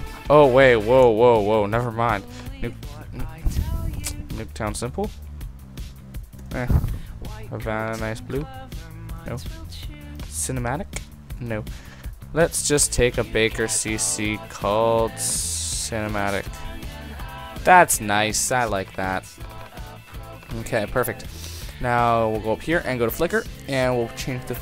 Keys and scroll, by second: 1.1 super+z, 6.5 super+z, 9.3 super+z.